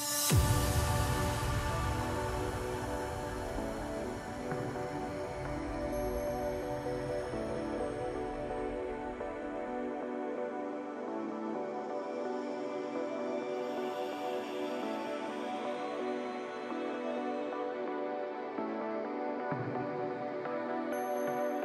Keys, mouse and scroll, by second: 0.3-2.6 drag, 2.6-3.6 scroll up 5, 3.6-3.9 scroll up 3, 3.9-6.9 drag, 7.1 scroll down 2, 7.4-8.4 middle drag, 8.4-8.8 scroll up 1, 8.8-10.6 middle drag, 10.6-11.8 scroll down 6, 11.8-12.8 scroll down 8, 13.1-13.7 scroll down 4, 14.6-15.3 drag, 15.3-16.4 scroll down 3, 16.4-18.3 drag, 18.3-19.9 middle drag, 19.9 scroll up 2, 20.1-21.4 middle drag, 21.4-21.6 scroll down 1.